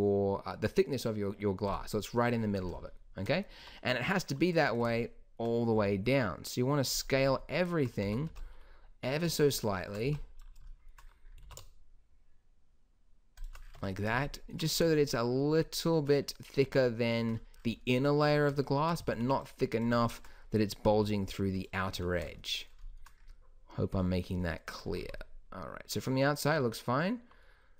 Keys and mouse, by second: 2.6-3.7 drag, 3.7 Tab, 5.9 s, 8.2 a, 8.4 b, 10.2 b, 11.6 alt+s, 13.9 Tab, 16.4 middle click, 16.8 Tab, 18.4 middle click, 19.2 a, 19.4 b, 21.1 s, 22.1 Tab, 25.2 z, 26.9 middle drag.